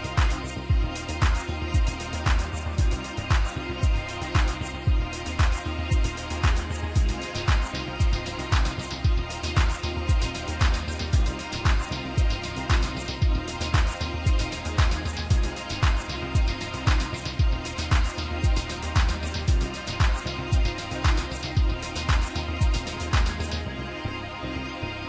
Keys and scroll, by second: 24.9 ctrl+r.